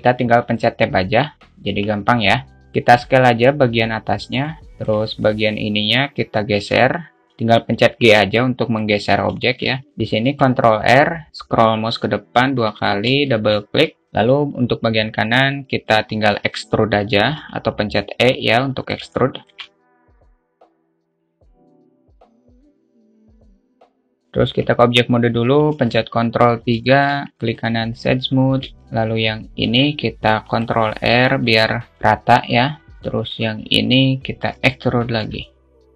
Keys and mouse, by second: 1.4 Tab, 2.0 Tab, 2.6 Tab, 2.8 click, 4.6 s, 4.8 alt+shift+middle click, 5.5-6.6 drag, 7.2 click, 7.4 s, 9.7 middle click, 10.6 ctrl+r, 13.5 alt+shift+middle click, 14.0-16.0 alt+shift+drag, 14.0-16.0 alt+shift+middle drag, 16.5 e, 19.5 alt+shift+middle click, 19.9-23.8 typing, 21.0 ctrl+z, 23.7 click, 24.3 alt+z, 25.8 Tab, 26.0 ctrl+3, 27.1 alt+shift+middle drag, 27.6 right click, 28.7 Tab, 30.0 ctrl+r, 33.1 alt+z, 33.3 click, 34.9 e.